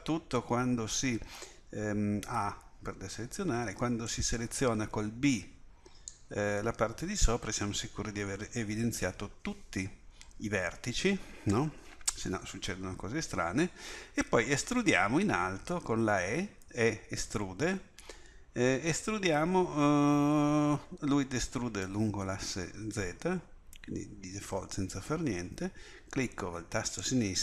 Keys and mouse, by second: 2.2 a, 3.5 b, 16.6 e.